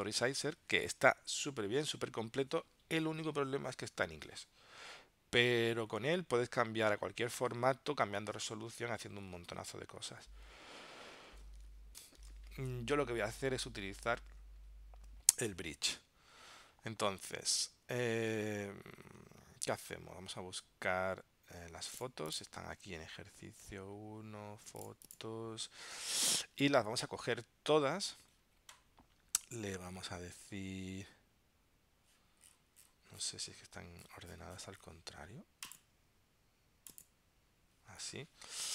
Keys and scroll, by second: 12.1 ctrl+alt+super+p, 14.2 super+Tab.